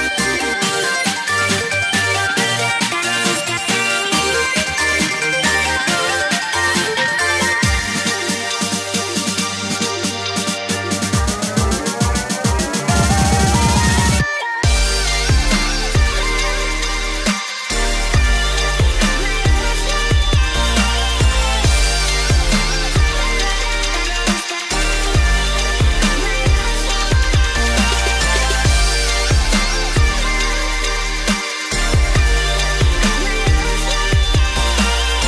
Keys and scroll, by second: 9.7 ctrl+=, 9.8 ctrl+=, 19.3 ctrl+0, 19.9 ctrl+=, 20.1 ctrl+=, 21.4 ctrl+=, 21.5 ctrl+=.